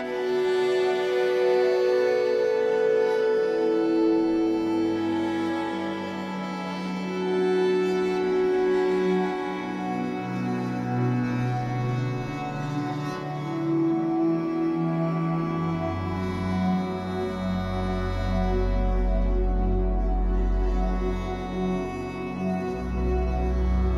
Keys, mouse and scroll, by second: 0.0-1.7 typing, 2.7 click, 3.1 click, 3.5 alt+shift+click, 3.7 shift+middle click, 3.9-4.4 shift+scroll up 6, 4.4 s, 6.5 click, 6.7 g, 7.3 click, 7.4 g, 8.0 click, 8.3 g, 9.5 g, 10.5 click, 10.9 click, 11.0-14.1 typing, 11.6 click, 12.4 click, 13.2 click, 14.0 click, 15.0 click, 15.1 g, 16.2 scroll down 2, 16.4 Tab, 16.8 z, 16.9-17.3 scroll down 7, 17.3 click, 17.8-20.8 scroll up 2, 22.0-22.5 middle drag, 22.5 scroll down 1, 22.7 shift+middle drag, 22.9-23.4 scroll up 5, 23.4-23.7 shift+middle drag, 23.7 ctrl+s.